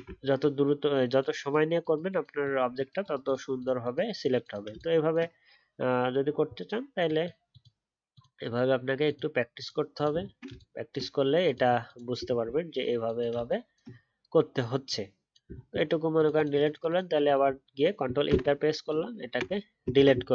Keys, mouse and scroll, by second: 0.1 alt+scroll up 1, 10.1 alt+scroll down 1, 12.4 alt+scroll down 1, 17.4 alt+scroll down 1, 17.5-18.2 alt+scroll up 1, 18.2 ctrl+Return.